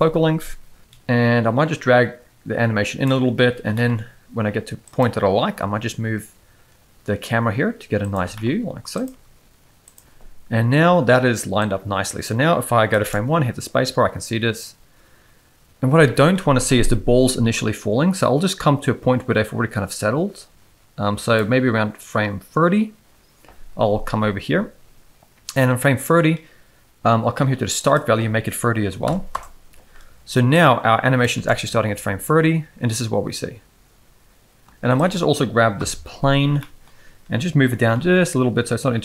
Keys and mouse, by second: 0.8-3.0 drag, 3.6 g, 5.4 g, 8.2 g, 9.1 g, 11.6-12.9 drag, 13.0 space, 15.9 space, 16.8-21.4 drag, 27.8-29.3 drag, 30.5-31.2 drag, 31.3 space, 34.6 space, 35.0 click, 35.8 KP_1, 36.6 shift+middle drag, 37.6 g.